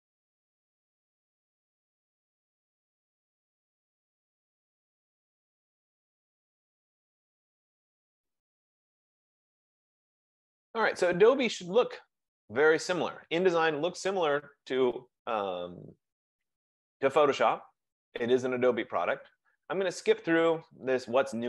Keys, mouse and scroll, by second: 2.9 F15.